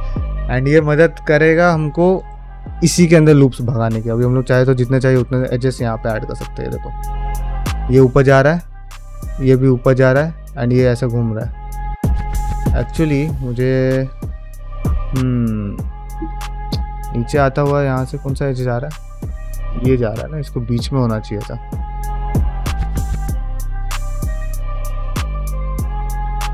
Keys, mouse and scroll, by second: 13.6 middle click, 13.6 scroll up 1, 13.9 shift+middle click, 14.4-16.3 scroll down 1.